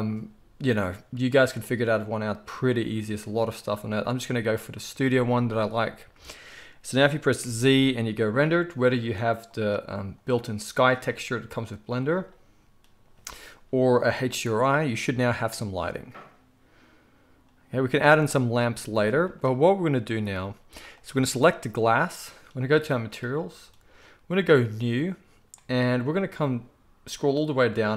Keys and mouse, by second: 5.3-10.1 middle drag, 7.4 z, 10.1-11.6 drag, 11.6-20.8 middle drag, 18.8 z, 20.8 click, 20.9-22.9 middle drag, 22.9 click, 23.1-24.6 middle drag, 24.6-27.9 drag.